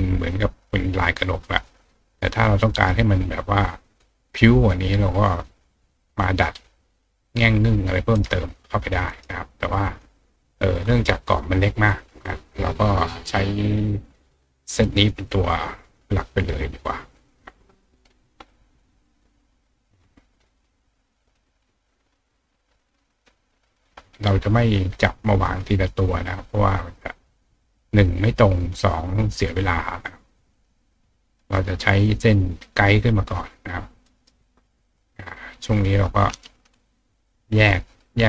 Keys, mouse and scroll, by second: 0.6 click, 1.6 click, 2.5 click, 4.0-4.7 drag, 5.6 click, 6.2 click, 7.8 click, 8.1 right click, 9.1 right click, 10.0 click, 11.9 click, 12.9 click, 14.0 click, 15.1 click, 16.6 click, 19.2 click, 20.4 click, 21.3-23.2 drag, 23.7 click, 24.7-25.6 drag, 26.5-28.7 drag, 29.5-30.5 drag, 30.9 click, 32.0 click, 33.1-34.2 drag, 34.0-37.3 right drag, 35.4 click, 36.2-36.9 drag, 37.7-38.2 drag.